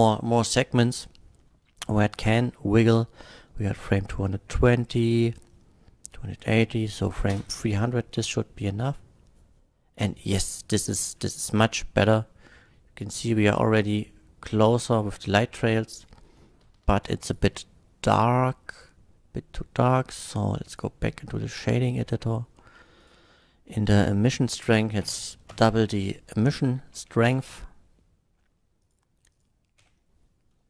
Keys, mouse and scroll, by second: 7.3 space, 8.2 F12, 17.3 click, 18.7 click, 20.7 click, 22.0 middle click, 22.3 middle click, 23.0 click, 23.5 middle click, 24.3 click, 25.1 KP_8, 25.5 Return, 26.5 click, 27.3 F12, 28.8 click, 29.3 click.